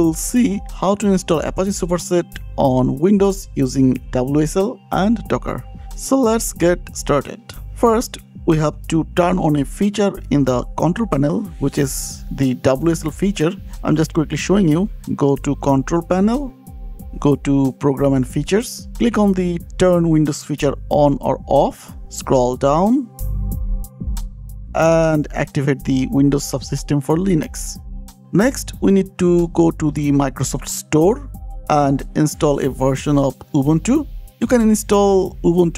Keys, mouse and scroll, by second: 1.9 click, 7.2 click, 7.6 click, 7.6 scroll down 2, 14.4-15.1 typing, 15.6 click, 16.0 shift+click, 17.0 click, 17.7 click, 20.7 click, 28.2 click, 28.2 scroll down 4, 29.4 click, 30.2 click, 33.3 super+s, 33.7-34.8 typing.